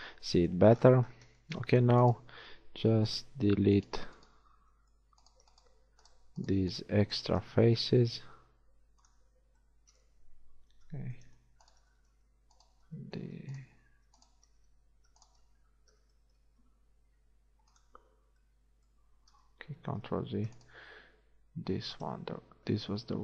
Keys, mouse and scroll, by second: 0.8 middle click, 2.2 middle click, 7.7 shift+x, 10.8 ctrl+z, 11.8 right click, 17.2 shift+x, 19.8 ctrl+z.